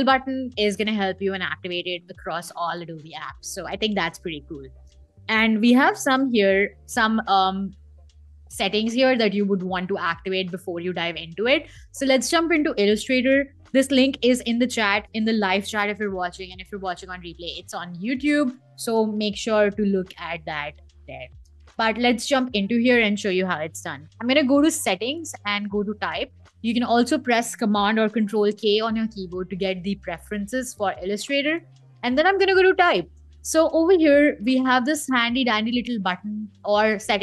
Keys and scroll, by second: 27.8 super+k.